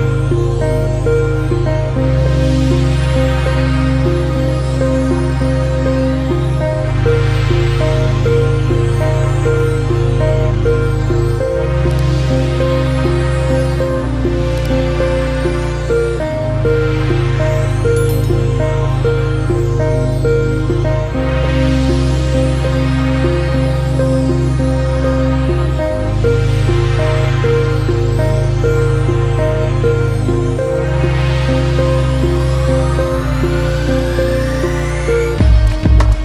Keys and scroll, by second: 12.3 ctrl+alt+shift+e, 36.1 ctrl+alt+z.